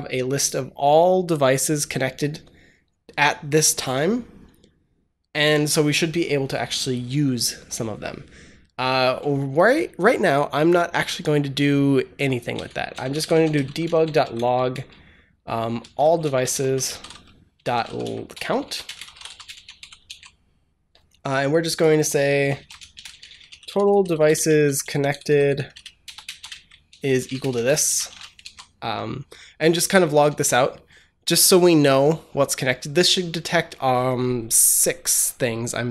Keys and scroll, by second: 12.4 Return, 12.6-20.1 typing, 22.2-27.9 typing, 28.3 ctrl+s, 30.1 ctrl+s.